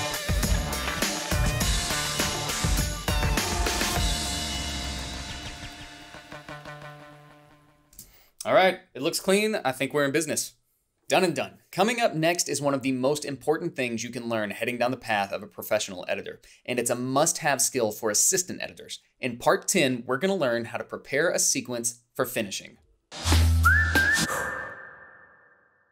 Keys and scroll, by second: 8.0 space.